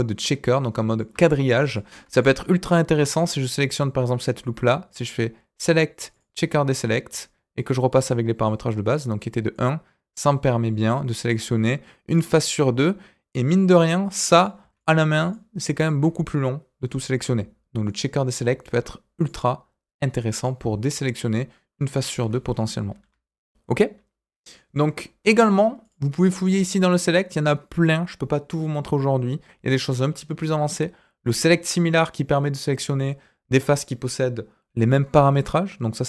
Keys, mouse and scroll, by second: 3.3 middle click, 4.8-6.2 drag, 7.5-11.7 drag, 11.7-12.8 middle drag, 14.3 click, 14.7 shift+click, 15.2 shift+click, 15.7 shift+click, 17.8 alt+click, 19.1-20.4 drag, 25.8-35.1 drag.